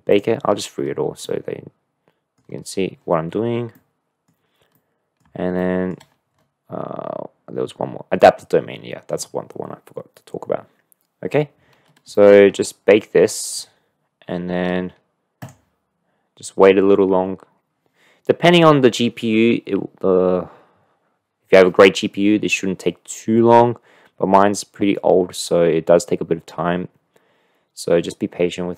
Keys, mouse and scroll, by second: 0.1 click, 1.3-1.9 drag, 1.9-2.3 middle drag, 2.5-2.8 scroll up 1, 3.7-4.2 middle drag, 4.7-5.2 middle drag, 5.6 shift+middle click, 12.1 shift+click.